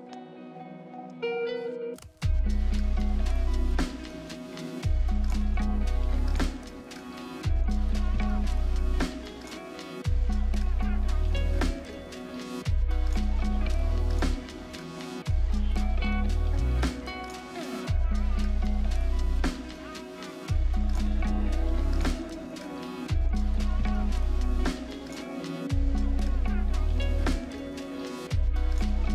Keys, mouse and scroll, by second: 0.0 double click, 16.5 middle click, 19.5 middle click, 24.1 right click.